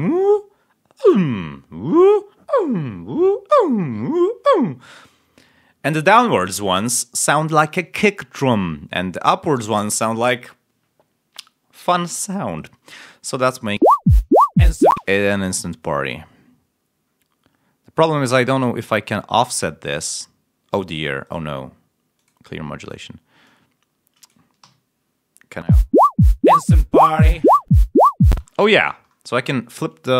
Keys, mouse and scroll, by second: 13.7 l, 14.8 space, 15.5 ctrl+scroll down 1, 18.5-19.7 drag, 21.2 right click, 22.1 click, 22.7 click, 23.4-24.4 drag, 24.5 l, 25.6 l, 27.4 ctrl+scroll up 2, 28.2 space.